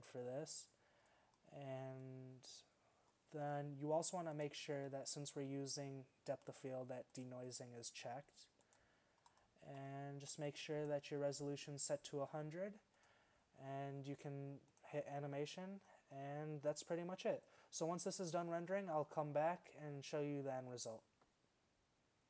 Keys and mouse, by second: 5.7-13.5 drag.